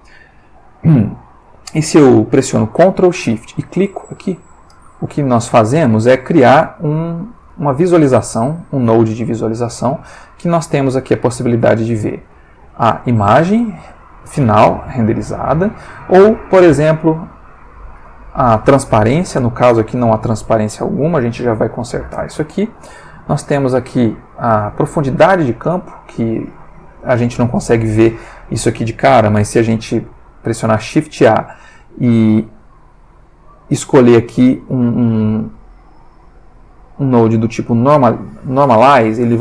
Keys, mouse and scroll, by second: 4.7 ctrl+shift+click, 6.0-6.8 drag, 7.0-8.2 drag, 8.6-9.8 drag, 12.3-13.1 drag, 16.3-17.7 drag, 23.2-24.2 drag, 29.6 shift+a, 37.8 click, 38.8 click.